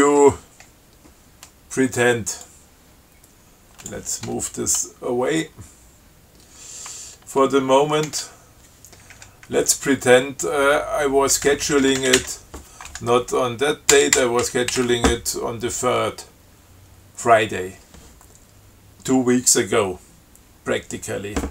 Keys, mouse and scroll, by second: 2.7-4.4 drag, 8.3 ctrl+w, 9.4 Insert, 9.8 Up, 10.1 Right, 14.1 BackSpace, 14.7 0, 15.0 3.